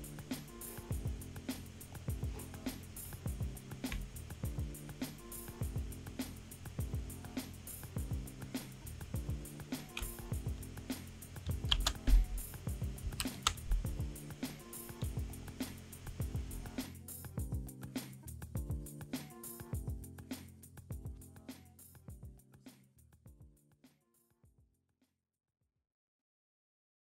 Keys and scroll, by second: 11.7 ctrl+alt+shift+0, 13.0 ctrl+-.